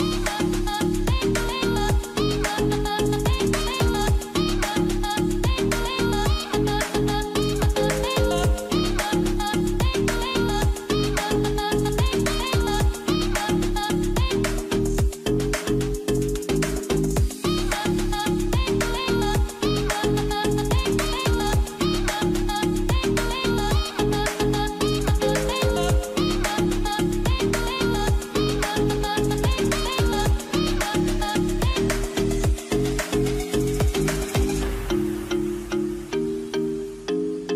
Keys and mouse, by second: 5.9 2, 9.1 shift+click, 15.9 alt+a, 16.9 k, 19.6 alt+a, 20.9 click, 20.9 2, 22.1 ctrl+click, 23.9 ctrl+click, 25.4 shift+click, 26.1-27.8 ctrl+drag, 30.9 k, 34.1 middle click, 35.3-36.6 middle drag, 37.3 shift+click.